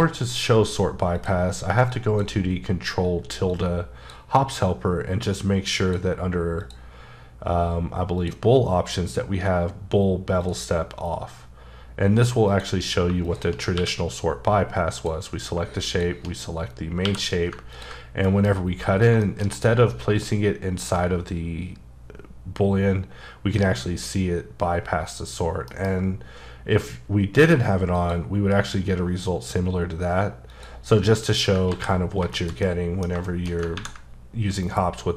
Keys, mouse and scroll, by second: 1.1 click, 1.9 click, 3.5 click, 5.8 click, 6.6 click, 8.2 click, 10.4 click, 12.5 click, 13.2 double click, 13.7 q, 14.9 click, 15.9 shift+click, 17.0 q, 17.7 ctrl+click, 18.2 middle click, 18.5-19.1 scroll up 5, 19.2 shift+middle click, 19.4 shift+scroll down 1, 27.8 F9, 27.9 click, 30.5 click, 31.1 scroll down 1, 31.7 ctrl+z, 32.0 scroll down 3, 32.3 shift+middle click.